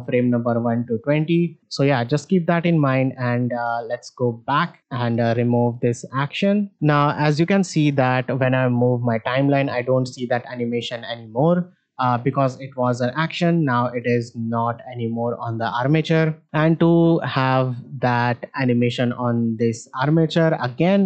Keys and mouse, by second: 0.2-1.6 drag, 4.8 ctrl+Tab, 6.4 shift+middle click, 6.9 shift+middle drag, 8.2-10.2 drag, 13.1 Left, 14.7 shift+middle drag, 16.8 shift+middle drag.